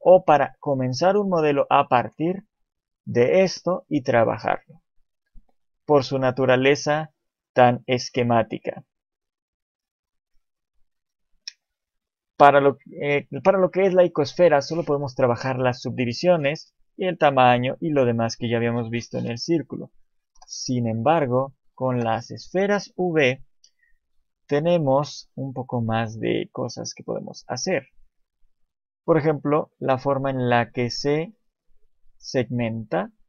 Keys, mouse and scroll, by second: 4.8 shift+middle click, 5.7 shift+middle click, 6.0 scroll up 1, 8.9 scroll up 2, 9.8-10.2 scroll down 2, 10.1 shift+middle click, 11.3 shift+middle click, 12.3 click, 14.4 click, 14.5 shift+click, 18.6-19.5 scroll down 3, 19.1-19.7 scroll up 2, 19.5 shift+middle click, 20.2 Delete, 21.2 click, 21.8 Delete, 23.3 right click, 24.2 shift+c, 25.0 shift+a, 27.1-28.2 scroll up 3, 27.5 shift+middle click, 30.6 click.